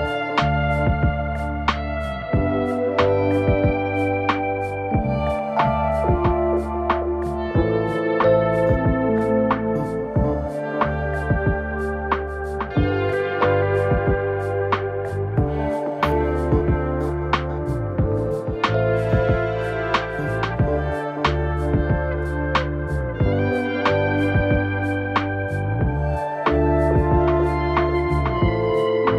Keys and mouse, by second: 0.2 shift+click, 0.5 m, 1.0 middle click, 1.3 middle click, 1.5 shift+middle click, 2.1 middle click, 2.7 right click, 3.5 click, 3.8 ctrl+z, 4.3 m, 4.9 click, 5.2 click, 5.6 shift+click, 6.1 m, 6.7 a, 6.8 a, 6.8 middle click, 7.3 Tab, 7.5-7.9 middle drag, 8.2 z, 8.9 Tab, 9.1 a, 10.3 middle click, 11.5 click, 12.0 alt+Tab, 12.2 alt+h, 12.3 a, 12.5 a, 12.5 right click, 12.7 shift+right click, 13.9 shift+h, 14.7 middle click, 15.0 middle click, 15.3 middle drag, 15.6 a, 15.8 middle click, 15.8 a, 16.0 shift+middle click, 16.3 middle drag, 16.8-17.1 middle drag, 17.3 Tab, 17.5 middle click, 17.9 middle click, 18.6 middle click, 18.9 Tab, 19.0 middle drag, 19.2 a, 19.3 middle drag, 19.3 a, 19.7 right click, 19.8-20.5 middle drag, 21.3 middle click, 21.6 alt+h, 21.9 a, 22.3 right click, 22.3 a, 23.2-24.0 drag, 24.4 right click, 25.0 click, 25.5-26.2 middle drag, 25.5 a, 26.5 shift+middle click, 26.9 shift+middle click, 27.3 middle click, 27.5 shift+middle click, 28.0-28.3 middle drag.